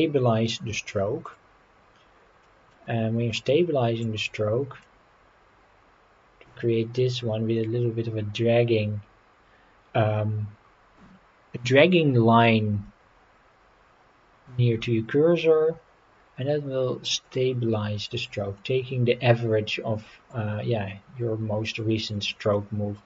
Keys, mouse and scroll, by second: 1.3 click, 2.4 middle click, 2.9 scroll up 4, 4.0-17.3 drag, 18.2-18.6 scroll down 1, 18.6-20.3 middle drag, 22.5 middle click.